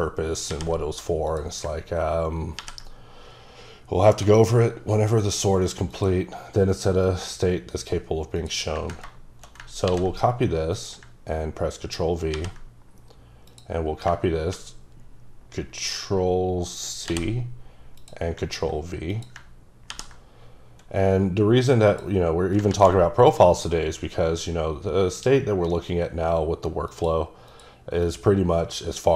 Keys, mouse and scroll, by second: 0.5 ctrl+v, 1.3 click, 2.6 ctrl+v, 5.2 click, 5.9 click, 8.7 click, 9.8 ctrl+c, 10.8 click, 12.3 ctrl+v, 13.5 click, 17.1 ctrl+c, 18.0 click, 19.9 ctrl+v, 21.9 click, 22.7 ctrl+z, 26.9 click, 27.5 click, 28.0 click.